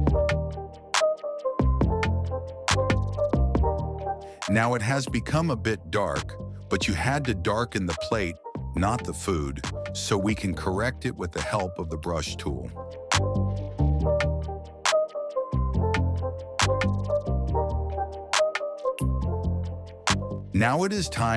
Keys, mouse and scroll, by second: 4.3 click, 9.4 click, 11.1 click, 13.3 click, 14.4 click, 15.3 click, 15.9 click, 16.5 click, 17.0 click, 17.8 click, 18.4 click.